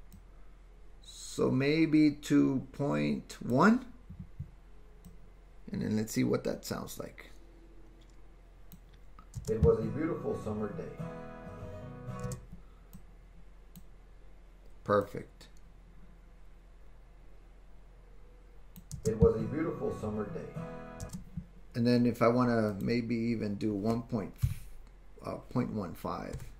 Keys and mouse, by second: 0.1-3.6 drag, 5.2-12.5 drag, 9.4 space, 12.3 space, 12.9 click, 13.8 typing, 15.2-21.2 drag, 21.1 space, 22.7-26.5 drag.